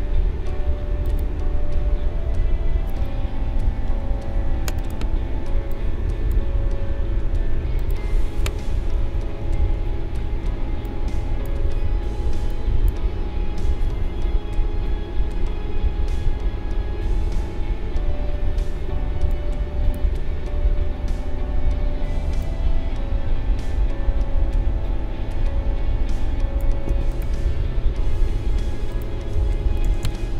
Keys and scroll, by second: 3.8 ctrl+g, 8.9 ctrl+-, 10.4 space, 17.6 ctrl+=, 18.8 space, 29.8 Left.